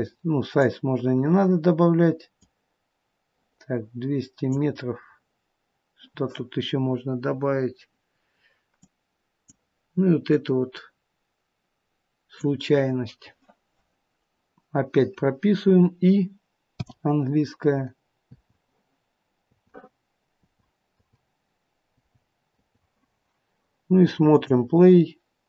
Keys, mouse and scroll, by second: 2.3 click, 8.7 click, 10.2 click, 13.8 click, 16.7 i, 18.3 i, 20.4 i, 21.0 i, 22.5 i, 24.3 click.